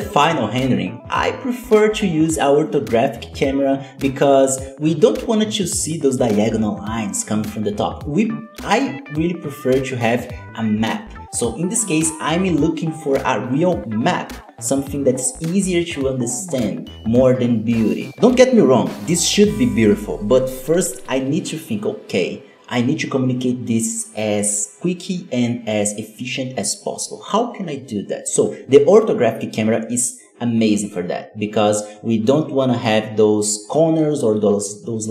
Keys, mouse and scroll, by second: 0.0 n, 1.5-1.8 scroll up 1, 2.1 g, 2.8 ctrl+alt+KP_0, 3.6 middle click, 3.6 scroll down 4, 3.7 middle drag, 4.0 g, 4.2 KP_1, 4.3 scroll up 6, 4.5 click, 4.9 scroll up 5, 5.1-5.5 scroll down 7, 5.3 middle click, 5.5 KP_7, 5.9 KP_0, 6.8 click, 7.8-8.5 drag, 8.5-9.2 scroll down 3, 9.4 click, 10.2-10.5 scroll up 4, 10.5 g, 11.9 click, 12.7 KP_0, 13.4-14.4 drag, 14.9 g, 15.7 g, 16.1 shift+click, 16.6 middle click, 16.7 scroll down 8, 16.8 middle click, 17.0-19.0 typing, 17.8 scroll down 2, 18.9 scroll up 2, 19.7 click, 21.0 g, 21.7 ctrl+s, 21.9 click, 23.0-25.2 drag, 25.4 click, 26.5-28.2 drag, 28.4 click, 28.7 z, 29.2 alt+a, 33.1 click, 33.6 ctrl+s, 33.9-35.1 drag.